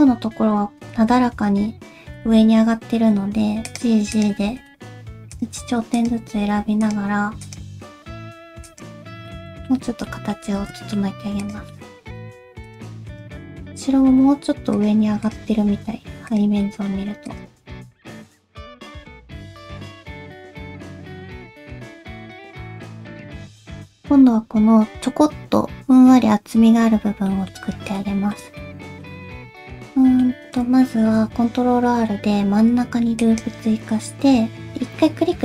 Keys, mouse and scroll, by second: 2.1 g, 4.4 click, 4.4 g, 5.9 click, 6.2 g, 7.4 click, 7.7 g, 9.0 scroll down 2, 9.3 middle click, 9.9 alt+z, 10.0 g, 10.0 middle click, 10.5 alt+z, 10.6 scroll down 1, 10.8 shift+middle click, 11.4 click, 11.7 middle click, 12.2 shift+middle click, 12.3 alt+z, 12.7 click, 13.1 shift+click, 13.4 middle click, 13.9 g, 15.2 click, 15.5 g, 16.6 middle click, 17.3 click, 17.6 g, 18.2 middle click, 18.5 click, 18.6 g, 19.1 middle click, 19.4 middle click, 19.7 shift+middle click, 19.8 click, 19.9 click, 20.0 middle click, 20.2 g, 20.7 middle click, 20.9 shift+middle click, 21.0 click, 21.2 click, 21.3 middle click, 21.5 g, 22.0 middle click, 22.8 scroll down 1, 23.3 shift+middle click, 27.3 middle click, 28.0 shift+middle click, 28.6 middle click, 29.9 middle click, 30.4 scroll up 1, 31.6 ctrl+r.